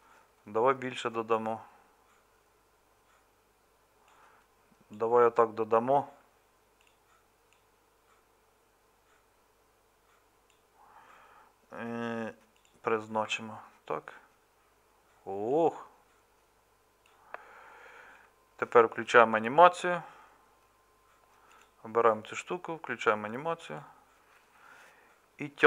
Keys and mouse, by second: 13.3 Tab, 16.2-21.6 drag.